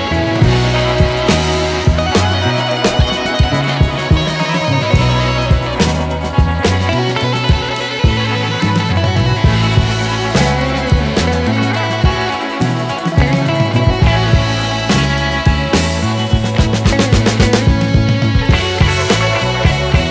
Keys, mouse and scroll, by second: 3.0 alt+right click, 4.2 alt+right click, 5.6 alt+right click, 5.8 alt+right click, 6.7 alt+right click, 7.9 alt+right click, 8.4 alt+right click, 9.5 alt+right click, 10.8 alt+right click, 11.3 alt+right click, 11.8 alt+right click.